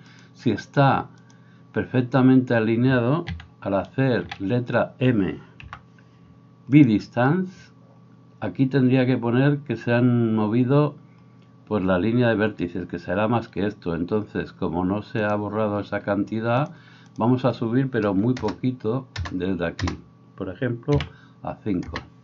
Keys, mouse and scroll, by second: 3.6 a, 4.6 a, 5.6 m.